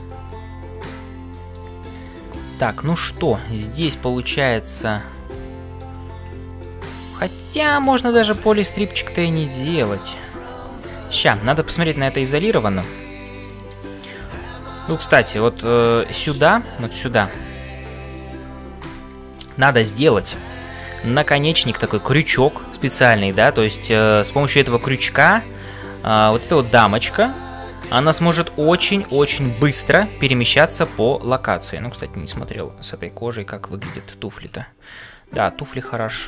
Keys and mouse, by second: 0.0-19.7 typing, 1.8 middle click, 3.4 shift+middle click, 4.2 middle click, 5.4 shift+middle click, 6.4 shift+middle click, 6.9 middle click, 9.4 middle click, 10.8 Tab, 11.5 ctrl+s, 12.0 shift+middle click, 12.5-13.6 middle drag, 14.4 shift+middle click, 15.9 middle click, 17.0-18.3 drag, 18.9 right click, 20.3 shift+middle click, 29.5 shift+middle click, 30.1-31.5 middle drag, 32.5 shift+middle click, 32.9-34.0 middle drag, 34.7 shift+middle click, 35.2 middle click.